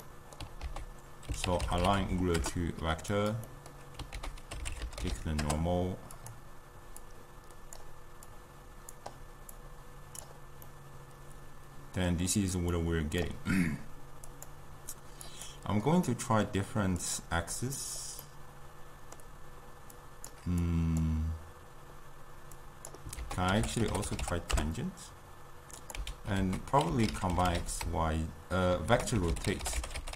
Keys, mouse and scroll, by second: 10.3 click, 10.7-14.4 middle drag, 14.4-16.1 drag, 16.1 middle click, 17.1-18.4 drag, 18.4-26.1 middle drag, 26.1 x.